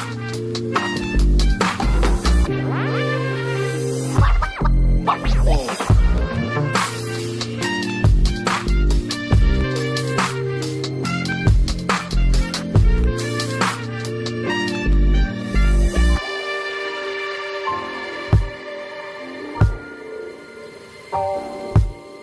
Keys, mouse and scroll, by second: 2.1 double click, 4.0 double click, 6.9 double click, 15.0 double click.